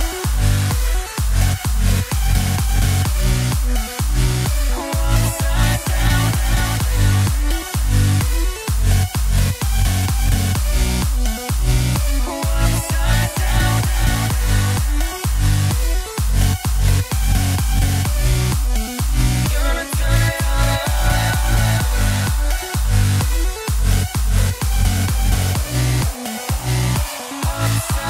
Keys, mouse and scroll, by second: 0.0-1.4 drag, 1.4 KP_3, 2.3 click, 2.5 shift+a, 5.4 g, 6.2 r, 7.3 KP_0, 8.4-9.4 shift+middle drag, 9.4 g, 11.0 click, 13.3-15.3 drag, 15.3 KP_7, 15.8-16.3 scroll down 1, 16.3 shift+d, 17.0 r, 18.5 g, 19.8 click, 21.0 KP_0, 22.1-22.5 scroll down 2, 22.9 KP_1, 23.9 click, 24.1 scroll up 1, 24.4 shift+a.